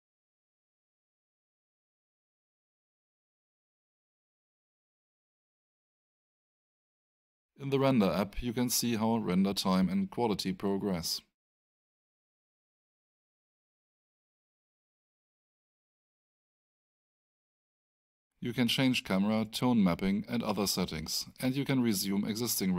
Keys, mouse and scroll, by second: 9.6 right click, 10.8 click, 17.0 right click, 18.7 click.